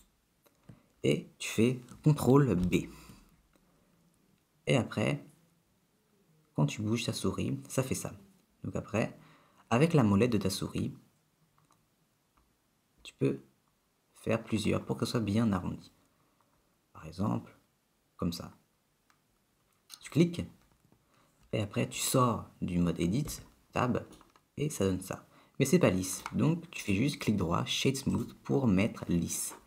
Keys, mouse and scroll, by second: 0.0 shift+click, 2.7 ctrl+b, 23.4 Tab, 24.3 middle click, 27.0 right click.